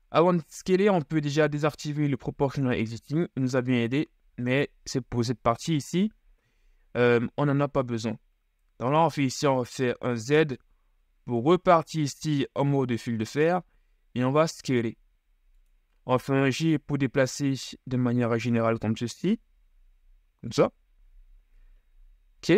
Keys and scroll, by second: 9.1 z, 12.7 s, 16.6 g, 21.2 z.